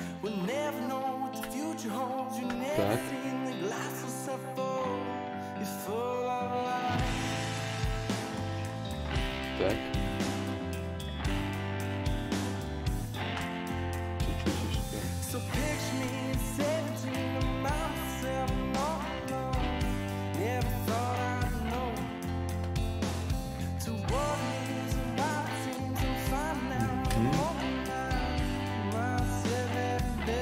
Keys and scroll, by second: 2.2 a, 29.1 Tab.